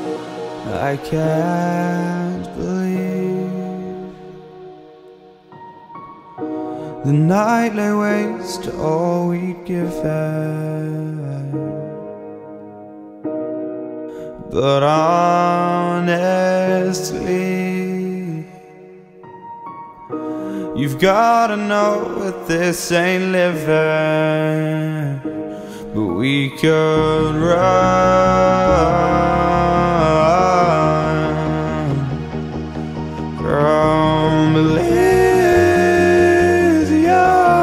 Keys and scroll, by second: 17.1 ctrl+z, 21.4 shift+e.